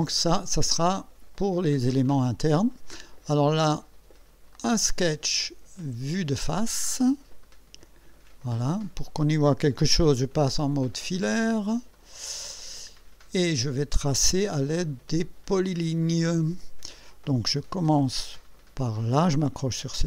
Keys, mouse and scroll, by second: 4.6 click, 6.3 click, 7.4 click, 8.5-9.4 right drag, 11.2 click, 12.0 click, 12.7 scroll up 1, 13.2 scroll down 2, 16.0 click, 19.9 click.